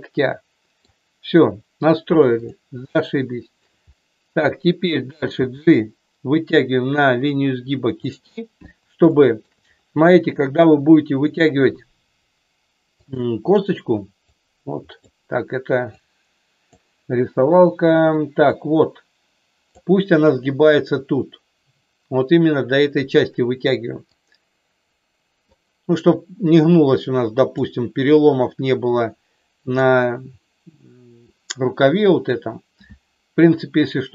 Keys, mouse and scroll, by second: 0.0 middle click, 2.4 click, 2.9 shift+middle click, 5.3 g, 7.9 click, 9.1 shift+middle click, 13.0 click, 14.3 click, 16.0 click, 18.5-19.8 drag, 24.0-25.5 drag, 26.1-27.5 drag, 29.6 click.